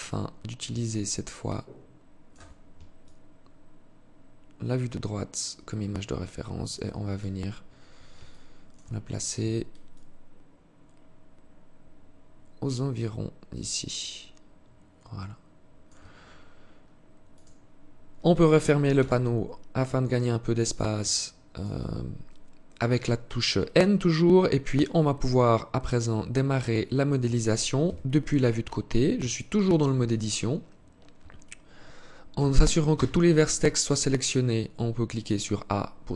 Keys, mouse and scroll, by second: 2.3 shift+click, 6.5 scroll up 2, 7.6 alt+shift+click, 16.7 click, 18.3 n, 18.8 scroll up 2, 19.0-19.8 scroll down 5, 20.4 alt+shift+click, 21.6-22.1 scroll up 1, 24.7 alt+click, 27.1 KP_3, 28.6 alt+shift+click, 29.5-30.2 scroll up 1, 30.2 scroll up 1, 31.7 a, 32.2 a.